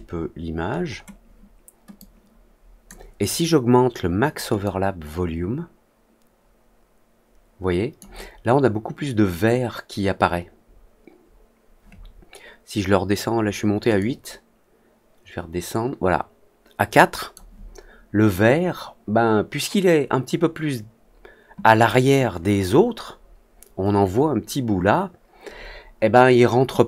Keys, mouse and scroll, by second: 0.6 middle click, 0.6-1.0 scroll up 2, 0.8 middle click, 1.9 click, 4.6-7.9 drag, 13.9-17.3 drag.